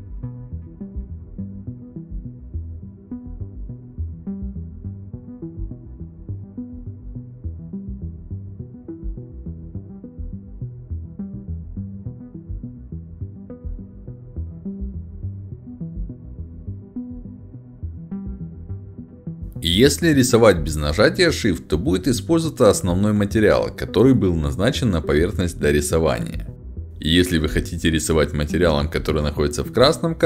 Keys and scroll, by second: 7.2 a, 7.5 w, 7.8 a, 8.2 d, 9.3 w, 12.4-14.1 typing, 16.3-18.3 typing, 24.1 s, 24.2 d, 24.4 w.